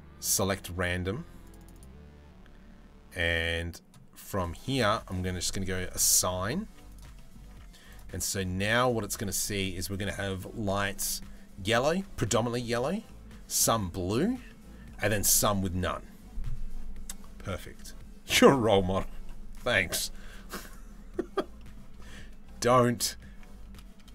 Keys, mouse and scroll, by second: 1.2 click, 1.4 click, 6.3 z, 6.8 middle click, 7.2 Tab, 7.5 click, 12.7-13.2 middle drag, 14.1 middle click, 21.2 middle click.